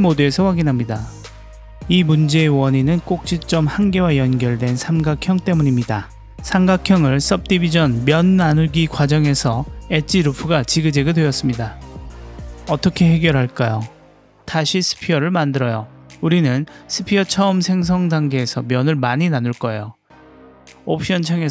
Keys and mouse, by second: 1.6 Tab, 3.9 click, 5.2 middle click, 7.0-8.2 middle drag, 8.6 Tab, 9.2 Tab, 9.8 middle click, 13.8 Tab, 14.5 Tab, 15.4 Delete, 15.6 shift+a, 18.5-19.8 drag, 20.6-21.5 drag.